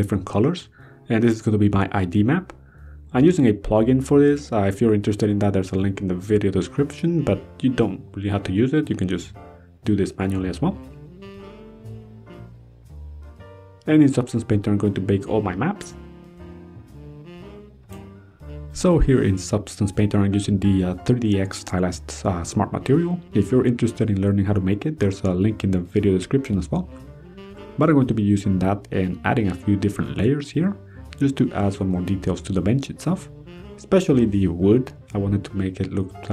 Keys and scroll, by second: 13.3 ctrl+s, 19.4 ctrl+d, 34.0 ctrl+d.